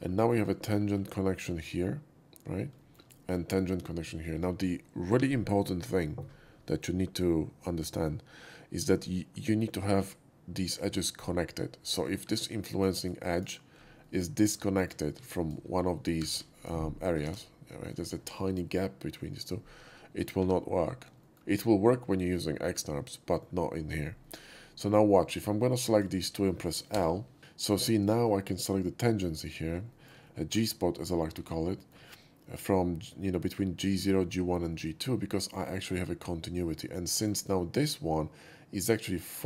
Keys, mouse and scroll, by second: 0.2 shift+middle click, 0.4 shift+scroll up 1, 0.9 shift+middle click, 2.7 shift+middle click, 3.1 shift+middle click, 11.8 click, 12.2 2, 12.7 click, 12.9 right click, 13.3 click, 14.0-14.5 middle drag, 14.7 shift+middle click, 15.1 1, 15.3 drag, 16.1 g, 16.3 g, 17.2 ctrl+z, 20.1 click, 20.4 2, 21.2 shift+middle click, 24.2 middle click, 25.1 click, 25.9 shift+click, 26.9 l, 27.4 middle drag, 27.9 shift+middle drag, 29.8 shift+middle drag, 30.2 shift+middle drag, 31.6 shift+middle click, 32.1-35.6 shift+middle drag, 36.8-37.2 middle drag.